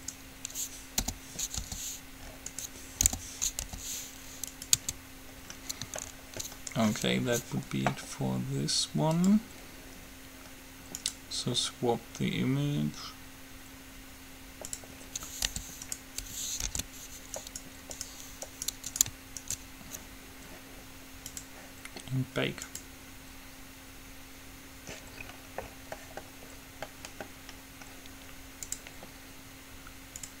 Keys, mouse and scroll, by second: 0.0-1.9 right drag, 3.2 o, 3.7 g, 4.9 Tab, 5.5-7.1 middle drag, 9.3-13.0 drag, 15.7 g, 16.9 alt+h, 17.6-21.6 right drag, 21.6-24.7 drag, 25.3-28.4 middle drag, 28.9-30.4 drag.